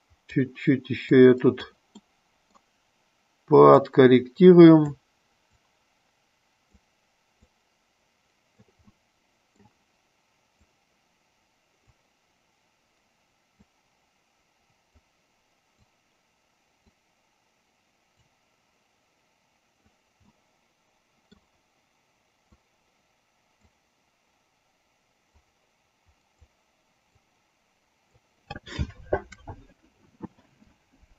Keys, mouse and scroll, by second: 1.4 click, 2.2 middle click, 4.1-5.3 drag, 5.9-7.0 drag, 7.8-9.0 drag, 9.2 middle click, 10.8-12.3 drag, 13.8-15.3 drag, 16.1-17.1 drag, 18.5-20.2 drag, 20.7 middle click, 22.8-24.1 drag, 25.6-26.7 drag, 27.4-28.5 drag.